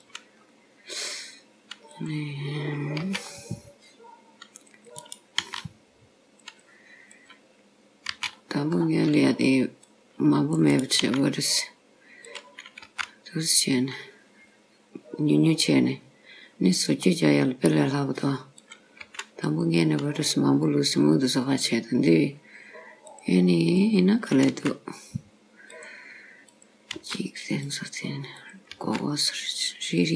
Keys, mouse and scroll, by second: 0.4 scroll up 3, 2.0 click, 3.1 c, 5.5 s, 7.2 click, 8.2 c, 11.1 s, 12.9 g, 17.1 middle click, 18.6 click, 19.1 g, 20.3-21.0 scroll down 3, 21.0-21.9 scroll up 2, 23.1 click, 23.9 click, 24.7 g, 26.5 click, 27.0 g, 28.4 click, 28.9 g.